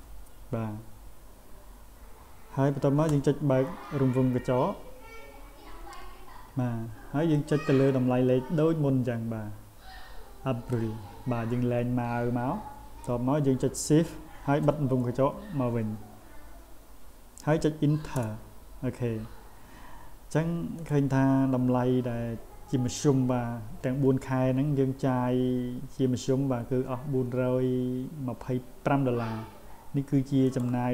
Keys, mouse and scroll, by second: 7.4-10.7 drag, 20.8 click, 30.5 click.